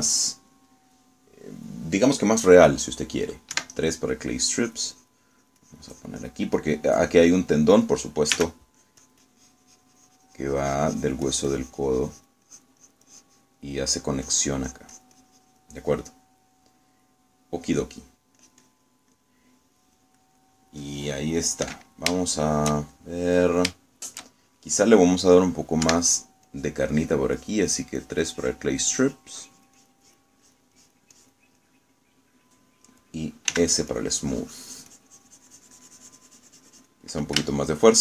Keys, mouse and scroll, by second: 4.6 3, 5.7 click, 6.5-7.5 drag, 8.0 click, 9.5 s, 9.9-14.7 drag, 15.3-16.9 drag, 19.5 click, 20.3-21.4 middle drag, 21.5 middle click, 22.1 middle click, 22.7 click, 23.4-24.5 shift+middle drag, 26.9 3, 27.6 click, 28.0 click, 28.5-31.5 drag, 31.5 click, 32.7-34.1 middle drag, 34.6 s, 35.0-38.0 drag.